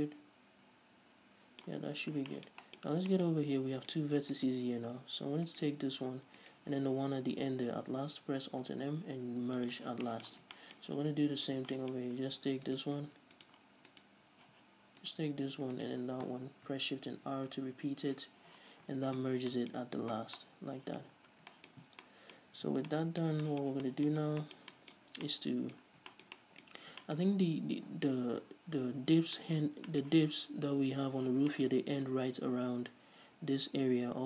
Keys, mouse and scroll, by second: 1.8-2.5 scroll up 2, 3.0-4.0 scroll up 4, 4.0 right click, 4.5 shift+right click, 5.7 right click, 6.6 shift+right click, 8.7 alt+m, 10.2-12.9 shift+middle drag, 11.7 scroll down 2, 12.2-12.9 scroll up 2, 12.9 right click, 13.5 right click, 14.1 right click, 14.6 z, 15.9 shift+right click, 17.6 shift+r, 18.3 z, 19.1 scroll down 1, 19.7-34.2 middle drag, 20.2 Tab, 20.4 scroll down 2, 21.3-21.7 scroll down 2, 22.1 scroll down 2, 22.7 a, 24.4 scroll down 2, 25.2 scroll up 2, 26.1 scroll down 2, 26.9-27.2 scroll up 2.